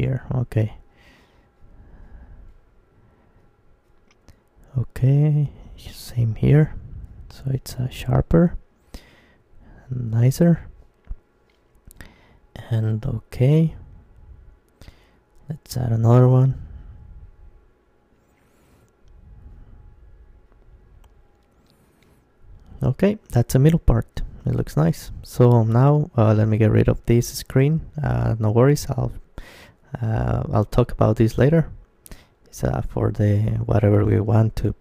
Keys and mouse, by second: 0.5 middle click, 1.4-5.1 middle drag, 5.1 ctrl+r, 10.7-12.5 drag, 12.5 middle click, 13.4 ctrl+r, 15.5-17.3 drag, 16.5 Tab, 17.3 middle click, 18.0 middle click, 18.2-19.5 middle drag, 19.7-24.0 middle drag, 24.0 alt+h, 25.2-26.9 right drag, 26.9 middle click, 27.8 Tab, 28.7 Tab, 29.7 g, 31.9-33.0 right drag, 33.0 Tab, 33.0-34.8 middle drag, 34.5 Tab.